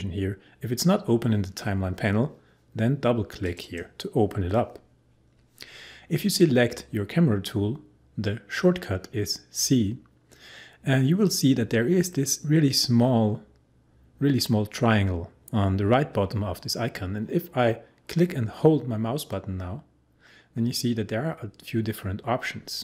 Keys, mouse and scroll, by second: 3.4 click.